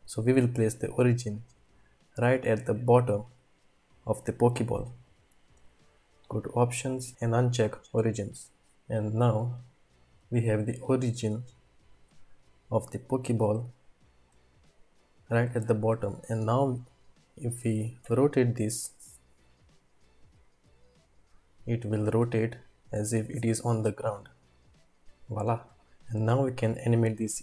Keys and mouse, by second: 0.9-3.7 drag, 6.2-8.5 drag, 8.7-10.3 middle drag, 10.6-14.1 middle drag, 14.7-15.5 shift+middle drag, 18.0 r.